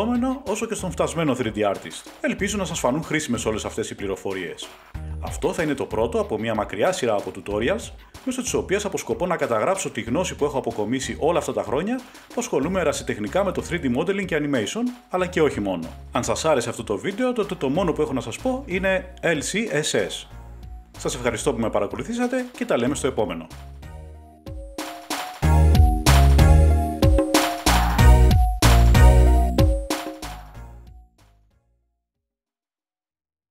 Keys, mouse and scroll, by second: 0.8 click, 2.0 middle click, 2.4-3.2 typing, 4.5 click, 5.9 middle click, 7.7 click, 8.5 g, 8.7 y, 10.1 right click, 11.0 g, 12.7 click, 13.9 click, 14.8 7, 15.7 g, 16.9 click, 17.4 r, 18.4 click, 19.6 r, 20.2 click, 23.1 middle click, 24.2 click, 25.4 click, 25.9-26.4 scroll down 1, 27.7 middle click, 28.5 click, 31.8 middle click.